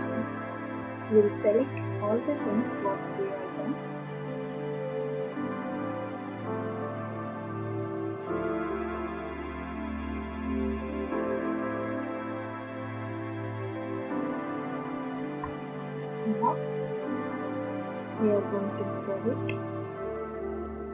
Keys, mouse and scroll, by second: 1.7-2.6 ctrl+drag, 2.6 ctrl+click, 3.6-5.6 middle drag, 4.0 ctrl+click, 5.6-6.0 scroll, 5.9-8.4 ctrl+drag, 5.9 middle click, 8.6-10.8 drag, 12.0 scroll down 2, 14.3 ctrl+click, 18.4 click, 18.9 scroll.